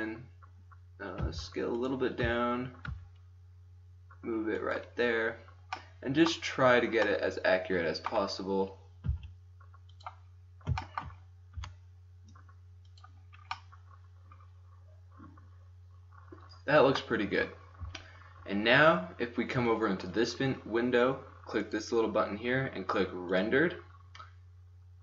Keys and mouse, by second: 1.2 s, 2.8 g, 4.8 click, 9.1 s, 11.7 g, 19.2 middle click, 21.6-21.9 drag, 23.7 middle click.